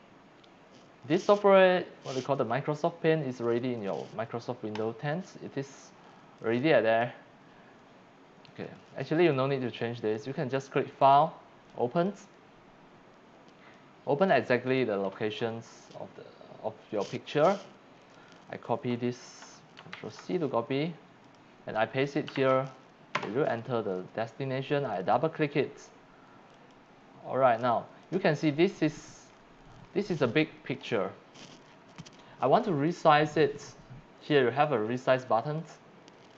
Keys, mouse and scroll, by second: 4.8 click, 6.4 click, 8.5 click, 10.5 click, 11.0 click, 12.0 click, 13.7-14.2 drag, 18.0 click, 19.9 ctrl+c, 21.2 click, 22.0 click, 22.3 ctrl+v, 23.1 Return, 24.8 click, 25.0 click, 26.5 click, 28.0 click, 29.3-29.7 scroll down 2, 29.9 scroll up 7, 30.8 scroll down 2, 31.7 scroll up 4, 35.6 click.